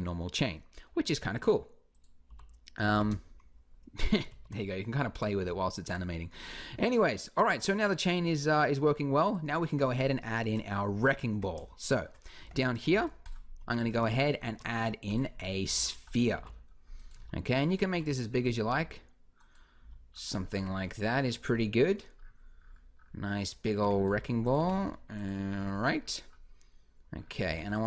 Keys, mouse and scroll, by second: 1.4-2.5 drag, 2.1 g, 4.1 ctrl+z, 5.2 Escape, 10.3 KP_1, 11.1 Tab, 12.2 Tab, 12.7 shift+s, 13.5 Tab, 14.2 shift+a, 15.5-18.5 typing, 19.6 s, 20.3 Tab, 23.6 Tab, 23.8 s, 24.3 g, 25.4 Tab, 27.3 b.